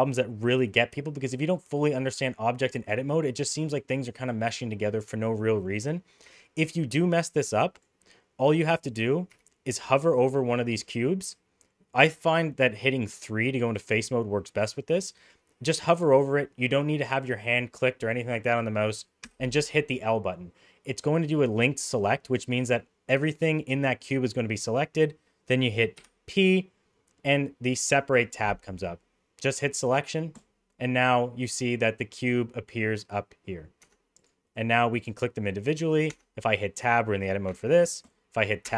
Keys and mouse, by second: 5.3 middle click, 6.2 Tab, 7.1 middle click, 9.2 3, 19.2 l, 25.9 p, 33.8 Tab, 34.6 click, 36.0 Tab, 37.4 Tab, 37.9 click, 38.6 Tab.